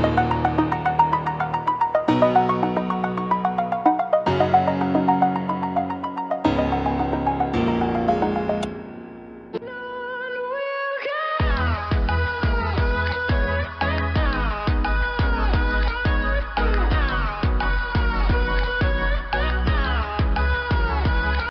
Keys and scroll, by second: 3.8 space, 4.3 ctrl+0, 6.2 F7.